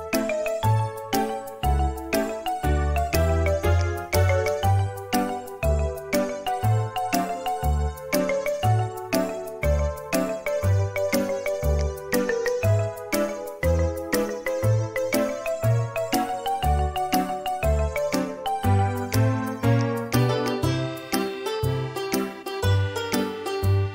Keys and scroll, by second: 1.5 m, 8.0 space, 9.9 space, 10.6 m, 13.6-14.5 typing, 22.2 b.